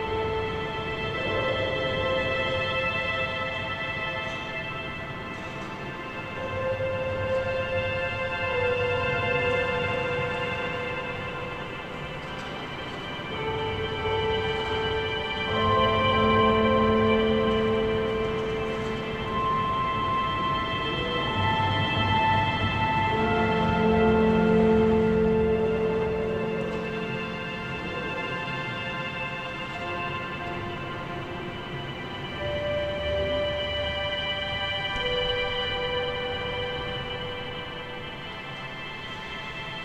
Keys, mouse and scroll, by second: 2.4 a, 3.4 g, 7.0-7.3 scroll down 1, 7.3-10.5 shift+middle drag, 11.8 a, 12.0 a, 12.4 click, 13.1-13.8 scroll up 1, 13.8 g, 15.7 a, 15.9 a, 16.2-18.2 scroll up 1, 18.2 ctrl+r, 19.8 a, 20.0 a, 20.7 1, 20.9 click, 21.3-21.9 scroll up 1, 21.9 g, 23.6 scroll up 1, 23.9 shift+middle click, 24.4-24.9 scroll up 1, 24.9 g, 26.5 scroll up 1, 26.8 shift+middle click, 27.2-27.5 scroll up 1, 27.5 g, 28.8-29.4 scroll down 11, 29.5 a, 29.7 a, 30.1 shift+middle click, 30.4 scroll up 1, 31.1 click, 31.5 g, 32.4 scroll down 4, 32.7 a, 32.8 a, 33.3 shift+middle click, 33.8-35.5 scroll up 2, 35.5 click, 36.2 z, 36.9 scroll up 2, 37.5 z, 37.9 shift+middle click, 38.4 scroll up 1, 38.6 g.